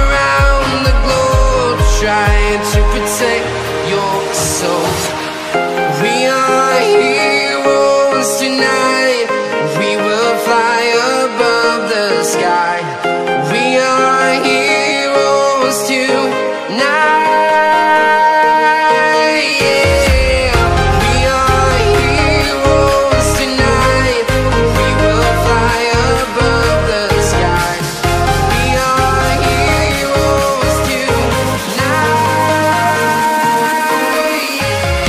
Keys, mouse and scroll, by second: 1.0 click, 1.5 Delete, 2.1 click, 12.1 click, 13.6 Return, 13.9 Up, 16.1 click, 17.4 click, 26.5 Return, 27.6 Up, 28.7 Right, 30.5 click, 31.3-32.5 scroll down 1, 32.5 click.